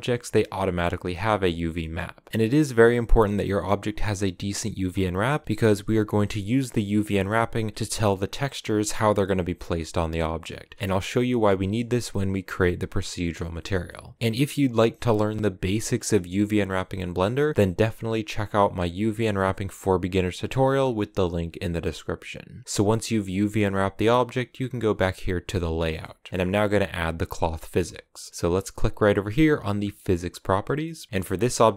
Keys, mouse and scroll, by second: 0.3 a, 0.8 middle click, 1.0 Tab, 1.2 right click, 1.4 Tab, 1.6 middle click, 1.8 Tab, 2.0 right click, 2.2 middle click, 2.3 a, 10.1-24.9 middle drag, 24.9 click, 25.5-30.1 middle drag, 30.1 scroll down 1, 30.3-31.7 middle drag.